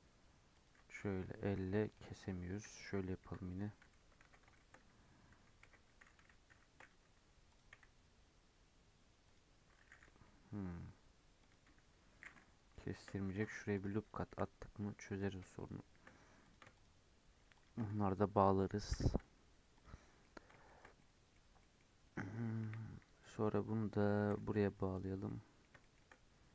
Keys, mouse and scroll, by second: 3.2 KP_7, 3.9 scroll up 1, 4.2 alt+z, 4.5-5.6 shift+middle drag, 5.6 alt+z, 6.4 k, 12.1-13.3 middle drag, 13.3 ctrl+r, 14.0 right click, 14.8 1, 15.1 click, 15.5 shift+click, 16.4 click, 16.7 shift+click, 17.5 shift+click, 18.9 j, 19.7 click, 20.2 middle click, 20.8 scroll down 2, 20.9 middle click, 21.3 scroll up 1, 21.5 middle click, 21.9-22.3 scroll up 1, 22.6 1, 23.2 click, 24.2 g, 25.2-26.5 middle drag.